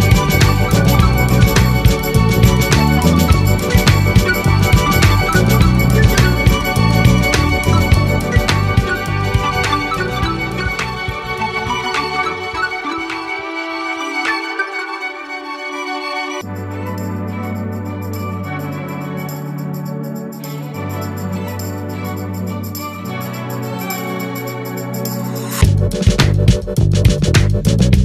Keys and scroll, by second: 11.5 ctrl+z, 26.1 ctrl+a.